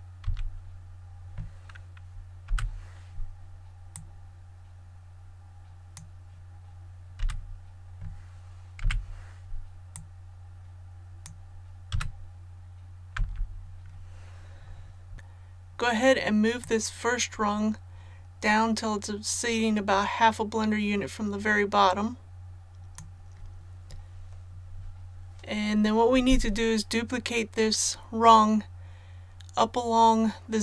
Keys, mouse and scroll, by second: 0.2 a, 2.4 l, 3.9-6.2 drag, 7.2 a, 8.8 l, 9.9-11.9 drag, 11.9 a, 12.3-13.1 scroll down 1, 13.1 l, 16.6-23.5 drag.